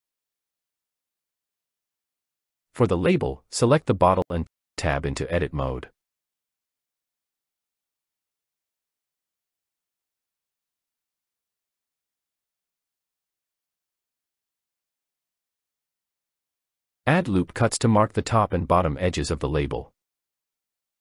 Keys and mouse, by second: 3.9 click, 4.3 Tab, 5.8 click, 6.8 middle click, 10.6 shift+middle click, 12.6 click, 15.3 click, 18.1 click, 20.4 click.